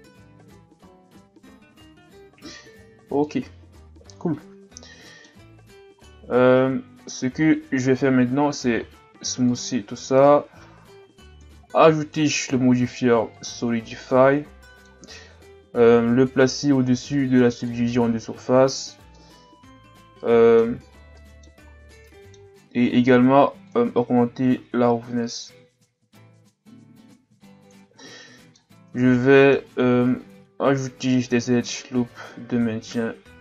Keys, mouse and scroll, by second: 0.3-0.7 scroll up 2, 0.7 Tab, 2.7-3.1 scroll up 5, 3.2-5.7 middle drag, 5.7-6.0 scroll down 1, 6.0-8.8 middle drag, 8.8 w, 11.3 click, 13.5 click, 14.1-17.2 middle drag, 17.2 click, 19.1-20.9 middle drag, 20.9 shift+scroll down 4, 21.1-21.7 middle drag, 21.7-22.0 shift+scroll down 4, 22.0-23.7 middle drag, 23.7 click, 28.0 middle click, 28.9 Tab, 29.2-30.6 middle drag, 30.6 ctrl+r.